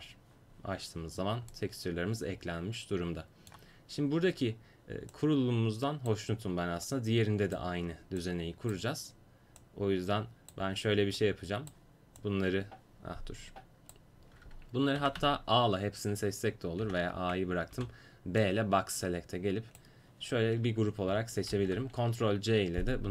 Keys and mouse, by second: 0.0-1.6 drag, 1.6 middle click, 5.2-12.3 drag, 15.1 a, 15.2 a, 16.9 a, 17.8 b, 21.6 ctrl+c.